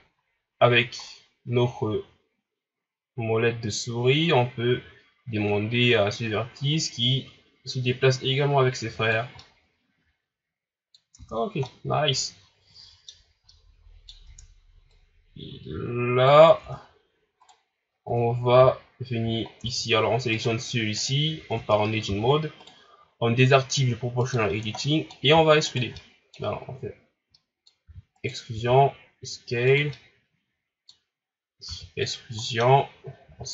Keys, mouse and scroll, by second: 9.4-11.2 middle drag, 11.2 Tab, 11.4 scroll down 2, 11.7-13.2 middle drag, 13.2 scroll up 2, 13.5 middle click, 14.3 Tab, 14.9-16.5 drag, 16.5 scroll down 2, 16.6 Tab, 17.4 right click, 17.8 scroll up 2, 18.1 Tab, 19.5 scroll down 1, 19.6 Tab, 20.4 right click, 21.0 right click, 21.5 Tab, 22.6 right click, 24.2 click, 24.8 middle click, 25.7 alt+right click, 26.0-27.9 middle drag, 27.9 e, 28.5 s, 29.9-31.2 middle drag, 31.2 scroll up 1, 31.7 e, 32.4 middle click, 33.3 s.